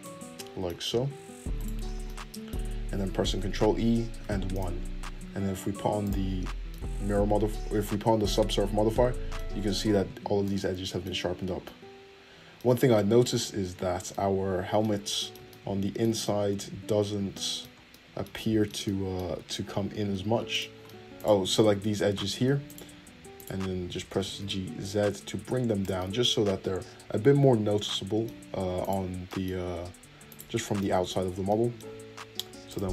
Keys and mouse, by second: 1.5 alt+shift+middle click, 1.5 alt+shift+right click, 3.3 shift+e, 4.6-6.0 middle drag, 5.0 Tab, 6.0 click, 6.4-20.5 middle drag, 17.0 Tab, 20.5 click, 20.8 middle click, 21.1 click, 21.2-22.7 middle drag, 22.7 ctrl+click, 23.6-28.8 middle drag, 24.1 g, 28.8 click, 28.9-30.3 middle drag, 30.3 shift+click, 30.4-32.6 middle drag, 31.2 Tab, 32.6-32.9 drag.